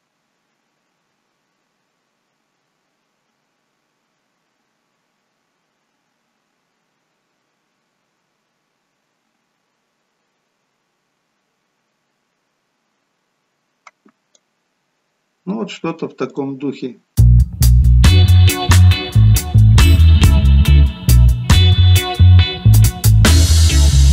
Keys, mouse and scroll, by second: 16.4 click.